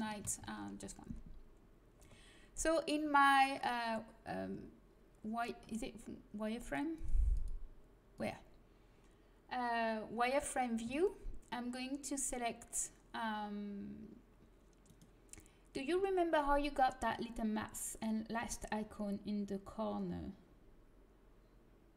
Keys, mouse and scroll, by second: 3.0 middle click, 6.6-9.6 drag, 10.8 c, 14.9-21.9 right drag.